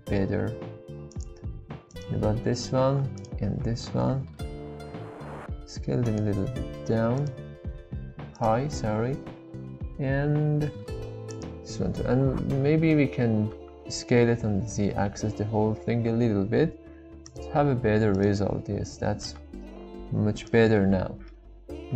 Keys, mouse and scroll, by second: 1.1 click, 1.9 alt+click, 3.2 alt+shift+click, 3.8 s, 4.0 shift+z, 6.0 click, 8.9 s, 9.3 shift+z, 11.3 click, 13.5 a, 13.5 s, 14.1 z, 18.1 alt+click, 19.3 shift+s, 19.4 shift+z, 20.7 Tab, 21.2-21.9 middle drag.